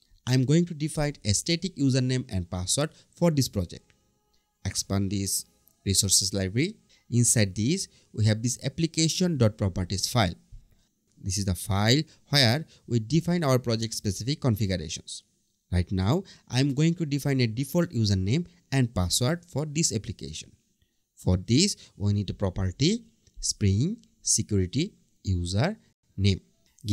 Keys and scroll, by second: 24.4 BackSpace, 26.4 Return.